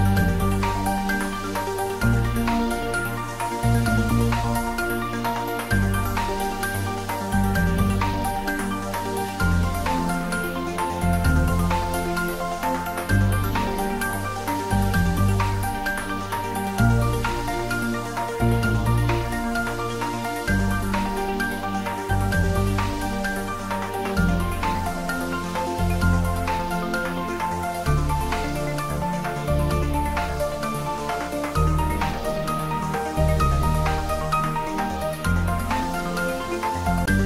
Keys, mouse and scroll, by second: 0.9-1.3 scroll down 1, 1.3-2.0 middle drag, 3.2 alt+e, 6.9 click, 12.4 click, 12.9-13.3 scroll down 1, 13.3-15.8 middle drag, 15.8-17.7 scroll up 1, 18.1 ctrl+b, 20.2 click, 20.6 Tab, 21.1-23.3 middle drag, 23.7-24.8 scroll down 1, 24.8 right click, 26.2 click, 27.5-28.0 scroll up 1, 28.0-29.5 middle drag, 29.8 scroll up 1, 30.7 scroll down 1, 33.0-33.6 middle click, 33.7 click, 34.2-35.7 scroll down 1.